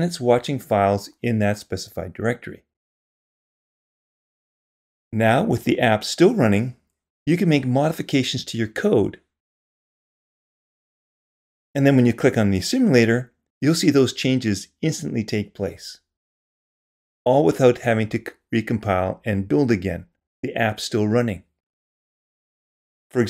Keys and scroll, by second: 2.0 super+0, 7.9 shift+super+y.